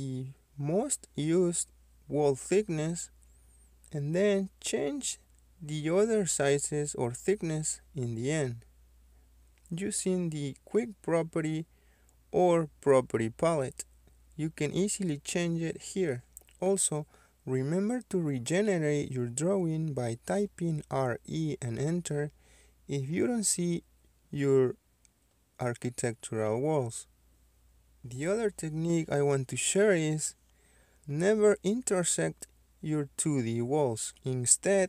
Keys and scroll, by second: 13.7 KP_2, 14.5 Return, 16.1 Escape, 17.2 Escape, 18.3-19.4 typing.